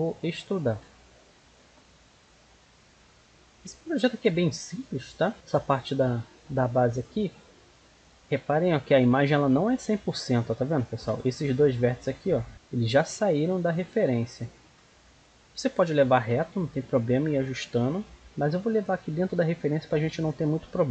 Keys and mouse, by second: 0.3 middle click, 2.2-4.1 drag, 7.4-10.1 middle drag, 10.6-12.5 right drag, 12.1-13.4 drag, 14.1-17.5 middle drag, 18.2 middle click, 20.6 middle click.